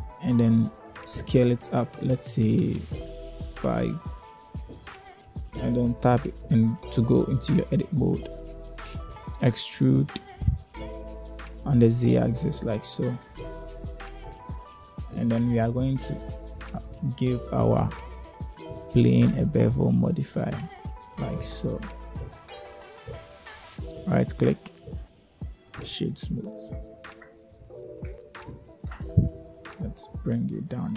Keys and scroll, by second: 2.1 s, 4.0 s, 4.6 Return, 6.1 Tab, 7.8 2, 9.7 3, 11.0 e, 12.3 z, 14.2 ctrl+Tab.